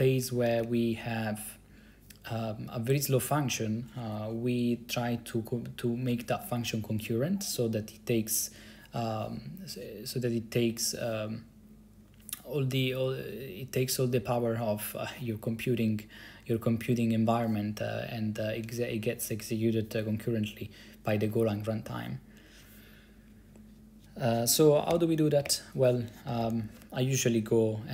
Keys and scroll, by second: 0.5 BackSpace, 0.7 BackSpace, 25.0-27.0 typing.